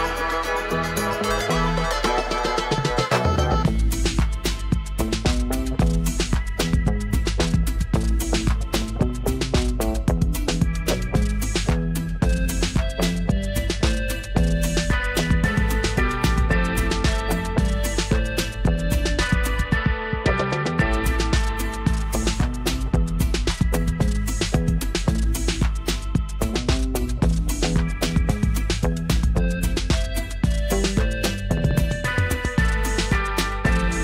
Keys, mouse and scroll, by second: 10.8-12.6 scroll up 1, 13.0-15.6 drag, 31.8 scroll down 1, 32.8-34.0 drag.